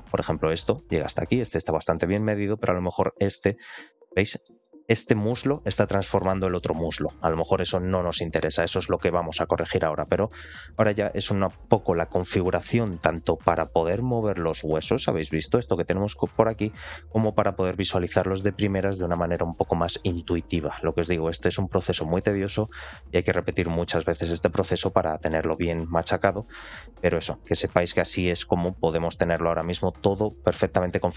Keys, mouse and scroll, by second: 0.0 shift+middle click, 0.6 middle click, 1.1 scroll up 1, 1.4 shift+middle click, 1.9 shift+middle click, 2.4 ctrl+click, 2.8 shift+middle click, 3.3 middle click, 4.0 scroll up 2, 4.3 shift+middle click, 4.9 scroll down 2, 13.0 scroll down 2, 13.8 ctrl+click, 14.1 middle click, 14.8 r, 16.2 middle click, 23.1 shift+middle click, 23.6 middle click, 24.4 shift+middle click, 24.7 middle click, 26.2 middle click, 27.0-27.3 scroll down 2, 27.3 a, 27.6 alt+r, 27.8 alt+g, 28.0 alt+s, 28.5 shift+middle click, 28.9 middle click.